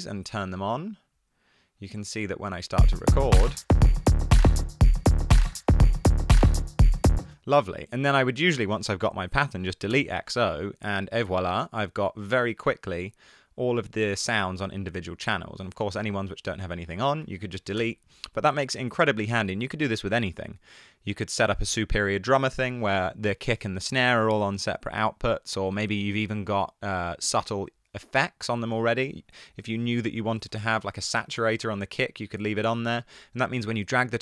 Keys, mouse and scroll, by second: 7.6 space, 10.1 BackSpace, 17.3 shift+Down, 17.4 shift+Down, 17.8 BackSpace, 30.5-30.8 typing, 31.1 Down, 31.4 Return.